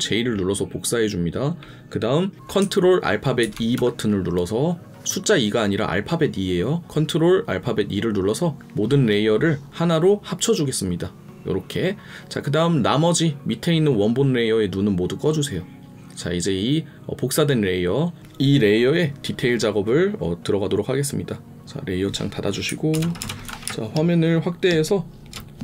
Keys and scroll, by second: 3.4 ctrl+e, 22.6 ctrl+e, 22.9 ctrl+KP_Add, 23.6 space.